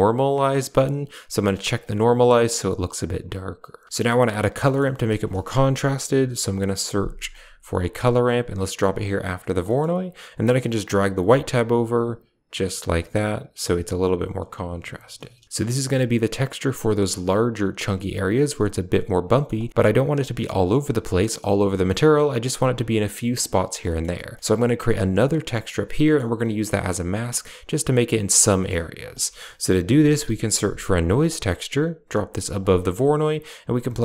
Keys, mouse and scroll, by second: 0.4 click, 1.3 click, 3.3 click, 3.8 middle click, 4.5 middle click, 5.0 shift+a, 9.2 click, 9.5 middle click, 10.7-13.6 drag, 19.2 middle click, 19.5 middle click, 23.3 click, 23.8 middle click, 24.2 middle click, 25.9 middle click, 28.5 middle click, 28.9 shift+a, 32.7 middle click.